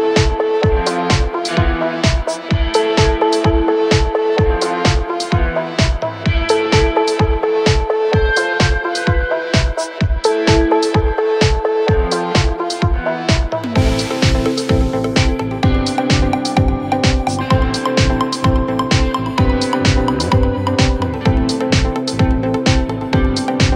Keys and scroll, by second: 0.1 4, 2.2 3, 2.6 ], 3.0 Delete, 4.4 4, 8.7 2, 21.8 ], 22.2 ].